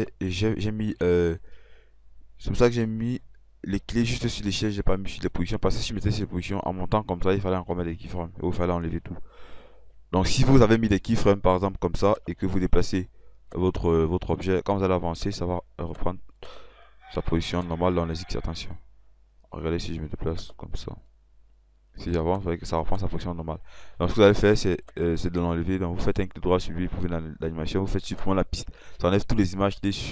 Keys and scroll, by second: 17.5 F8.